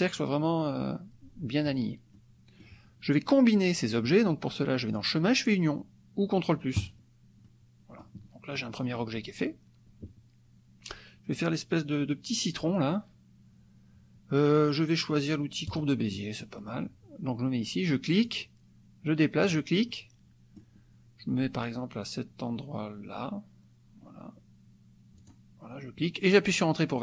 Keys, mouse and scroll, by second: 2.1 click, 4.9 click, 6.8 click, 7.5 click, 8.6 click, 15.8 click, 16.2 click, 18.2 click, 19.5 click, 19.9 click, 25.3 click.